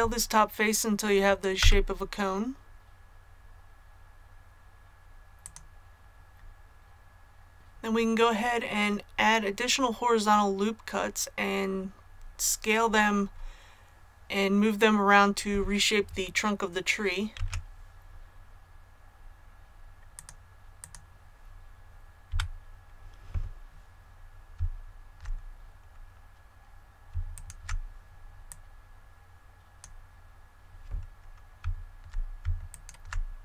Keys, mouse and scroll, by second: 1.5 s, 5.3 click, 17.3 ctrl+r, 18.1-18.4 scroll up 1, 20.1 click, 22.2 a, 27.2 alt+right click, 28.4-30.0 drag, 32.6 alt+right click.